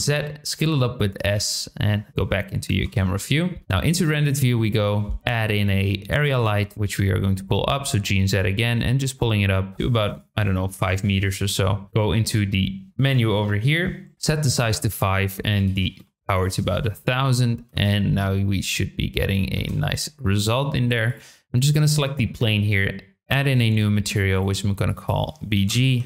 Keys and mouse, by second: 0.2 s, 1.1 click, 2.1 KP_7, 2.8 KP_0, 3.6 z, 5.1 shift+a, 6.7 g, 6.7 z, 10.1-11.3 drag, 13.5 click, 14.9-17.0 drag, 15.8 KP_0, 17.7 space, 19.6 space, 23.5 click, 24.0 click, 24.5 click, 24.8 click, 25.0-26.0 drag.